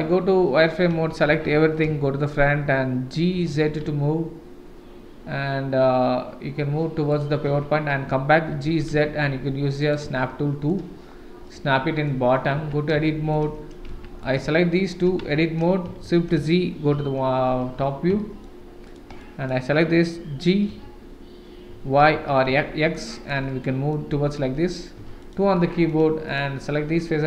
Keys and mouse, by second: 0.9 a, 1.8 KP_1, 3.3 g, 7.4 Tab, 8.5 g, 10.2-10.7 middle drag, 11.4-12.0 middle drag, 12.6 Tab, 13.0 shift+middle click, 14.2 click, 14.8 shift+click, 15.2 Tab, 16.0 shift+z, 16.9 KP_7, 18.2 shift+right click, 18.2 shift+click, 18.9 click, 19.2 click, 20.7 g, 23.5 middle click, 25.0 3, 25.2 click, 25.5 middle click, 26.3 click.